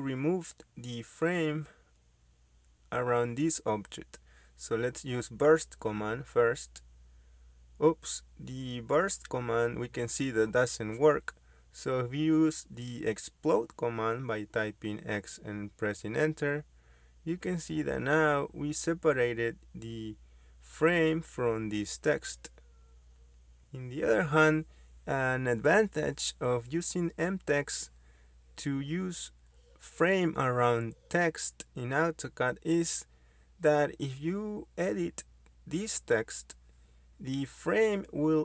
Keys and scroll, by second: 1.0 Delete, 6.8-7.1 typing, 9.1 Return, 13.1 Return, 14.9 x, 15.1 space, 20.4 Escape, 28.7 Escape, 31.5 ctrl+z, 32.3 ctrl+z, 34.4 Escape, 34.4 typing, 37.9 BackSpace.